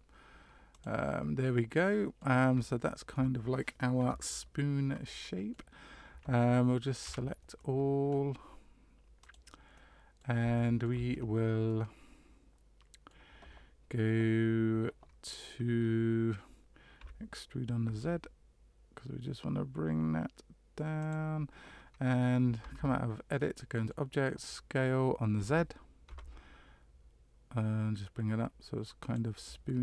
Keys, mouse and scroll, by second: 1.4 middle click, 2.6 shift+middle click, 4.0 KP_Decimal, 5.0 middle click, 7.0 a, 7.5 middle click, 9.2 click, 9.7 middle click, 10.5 shift+middle click, 11.1 scroll up 2, 11.6 middle click, 17.0 e, 22.6 Tab, 23.3 middle click, 25.3 s, 29.5 middle click.